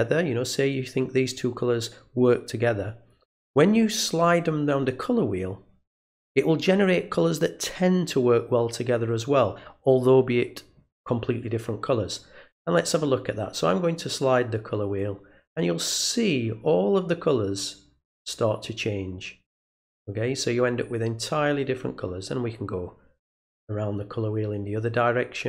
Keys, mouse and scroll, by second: 12.8-25.4 drag.